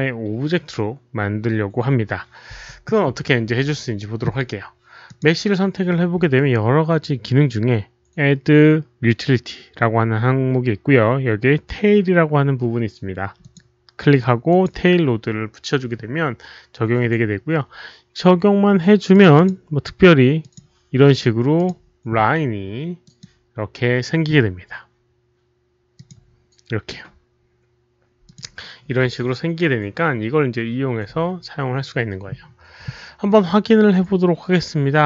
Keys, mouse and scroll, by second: 0.7 alt+click, 0.7 alt+right click, 5.0 alt+click, 13.3 click, 14.4 click, 19.0 click, 19.3 click, 20.3 click, 21.5 click, 23.0 click, 25.9 click, 26.5 click, 28.2 click.